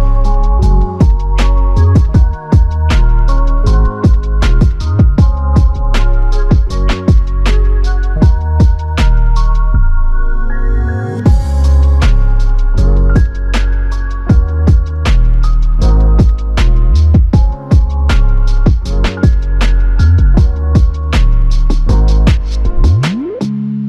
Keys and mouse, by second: 0.1 shift+click, 2.4 ctrl+alt+click, 8.0 f, 9.1 alt+click, 10.5 ctrl+click, 11.4 ctrl+i, 13.1 f, 14.0 ctrl+click, 15.8 alt+click, 16.7 f, 17.9 ctrl+alt+click, 18.9 f, 19.8 ctrl+click.